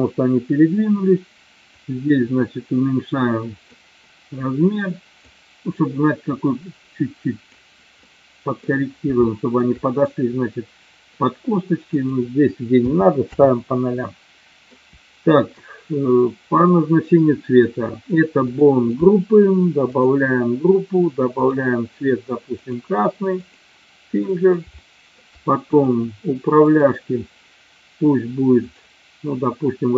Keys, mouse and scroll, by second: 1.8-3.8 drag, 5.3-7.6 drag, 8.3 middle click, 9.3 shift+middle click, 11.9-13.8 drag, 14.2 middle click, 16.6 click, 18.5 click, 20.1 click, 21.6-22.8 drag, 24.4 middle click, 24.8 shift+middle click, 26.7 click, 28.7 click.